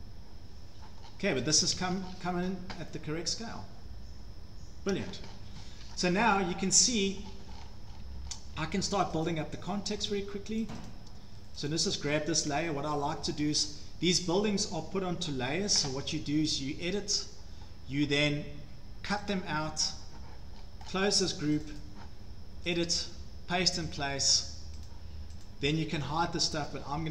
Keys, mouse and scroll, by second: 1.0-1.6 scroll, 1.5 Escape, 1.8 Escape, 1.8 scroll down 6, 1.9 Escape, 2.0-2.9 scroll down 7, 3.6 scroll down 1, 4.9 scroll down 1, 5.3 scroll up 7, 5.4 Escape, 5.6 Escape, 5.6 click, 5.8 click, 7.0 shift+middle click, 7.3 middle click, 7.5-8.2 scroll, 7.9 Escape, 8.3 scroll down 6, 8.6 Escape, 8.9-9.3 scroll, 9.3 click, 9.9 Escape, 9.9 click, 10.0 click, 10.1 Escape, 10.4 scroll, 10.7 click, 10.9 click, 11.7 click, 13.6-14.5 scroll, 17.0 click, 19.4 click, 20.6-21.2 scroll down 6, 20.9-21.2 scroll up 1, 21.2-21.7 scroll down 2, 21.7 click, 21.8 click, 22.7 scroll, 22.8 click, 23.9 right click, 24.9 right click, 25.4 right click.